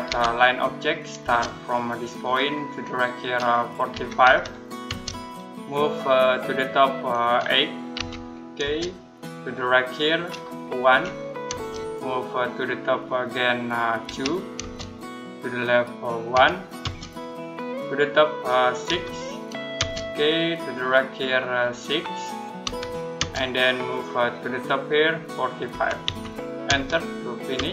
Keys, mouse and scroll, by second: 1.1 space, 2.0 click, 3.8-4.7 typing, 7.8-8.5 typing, 10.7-11.3 typing, 13.9-14.4 typing, 16.2 1, 16.6 space, 18.7 6, 19.6 space, 22.5 6, 23.0 space, 25.3-26.5 typing.